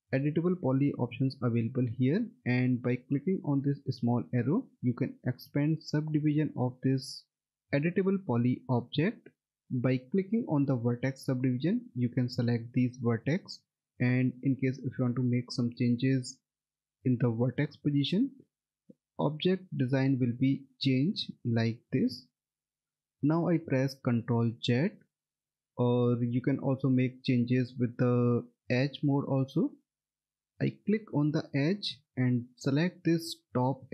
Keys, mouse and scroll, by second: 4.1 click, 11.0 click, 18.8 click, 20.6 middle click, 20.9-21.3 scroll down 1, 21.4 alt+middle click, 22.8 middle click, 24.5 ctrl+z, 30.8 click, 31.6 middle click, 32.3 alt+middle click.